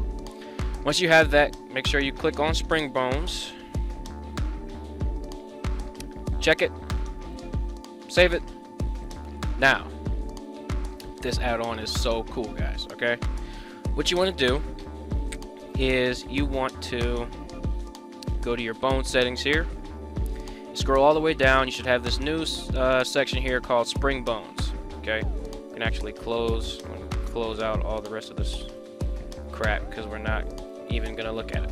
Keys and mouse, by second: 10.5 middle drag, 11.7 middle click, 24.9 click, 26.2 click, 26.6 click, 27.4 click, 28.7 click, 30.4 click.